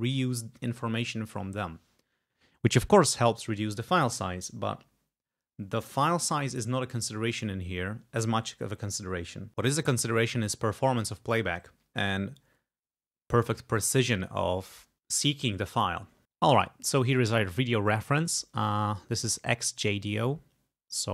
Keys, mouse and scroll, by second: 20.4-20.7 scroll down 2.